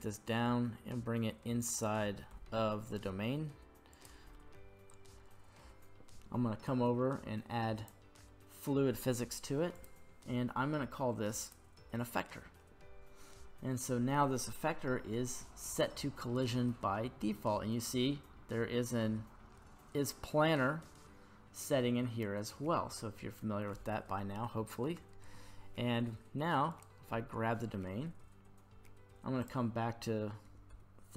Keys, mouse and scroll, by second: 1.6 click, 2.3 g, 2.9 z, 3.9 click, 4.3-5.6 middle drag, 7.8 click, 9.7-11.5 drag, 26.7 right click, 29.4-31.1 drag.